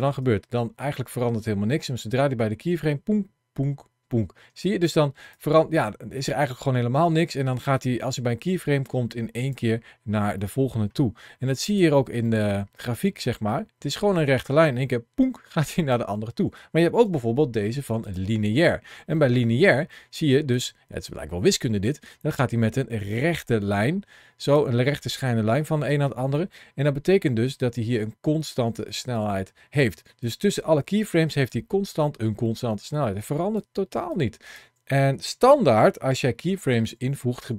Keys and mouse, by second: 4.3 space, 5.2-9.4 drag, 10.2 middle click, 11.5 click, 12.1 middle click, 13.7-15.8 drag, 16.9 t, 19.0 middle click, 20.4-24.4 drag, 25.7 space, 28.4 space, 29.0 click, 30.1 click, 31.3-33.4 drag, 33.9 click, 37.2 t.